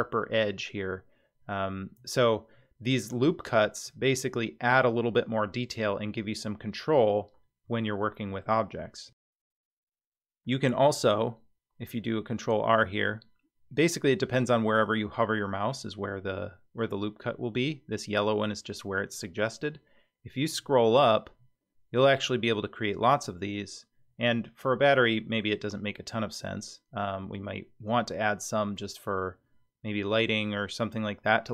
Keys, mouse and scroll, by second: 0.8-1.1 scroll down 3, 1.9-2.5 scroll down 3, 2.5-3.1 middle drag, 3.4-3.8 scroll down 1, 3.8-5.0 scroll up 6, 6.3-7.1 scroll down 4, 7.8-8.4 shift+middle drag, 9.1 Tab, 9.5-10.8 scroll down 3, 11.0 ctrl+r.